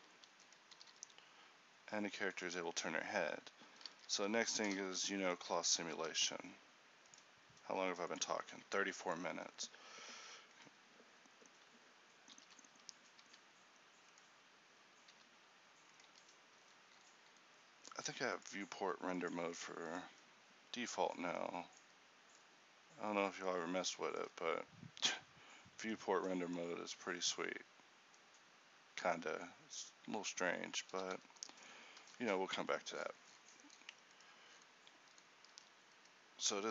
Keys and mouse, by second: 0.9 r, 3.9 a, 4.1 a, 5.0 alt+g, 5.0 alt+h, 6.2 a, 9.6-12.5 middle drag, 12.5 alt+h, 13.3 a, 15.2 h, 16.1 h, 19.2 click, 19.5-31.1 drag, 31.1 z, 31.2 z, 35.6 a.